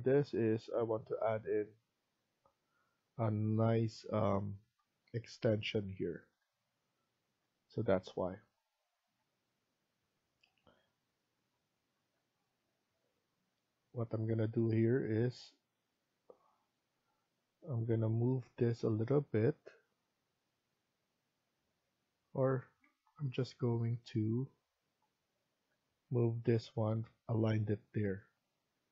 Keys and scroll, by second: 22.5 Escape, 22.7 Escape.